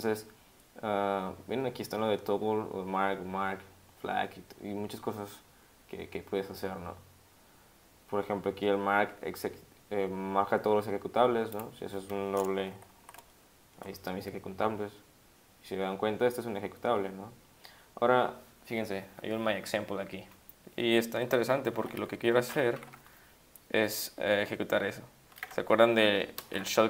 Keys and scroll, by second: 12.7 *, 13.0 *, 21.9 Caps_Lock, 22.0 u, 22.7 Up, 22.9 Up, 25.4 Caps_Lock, 26.4 alt+!.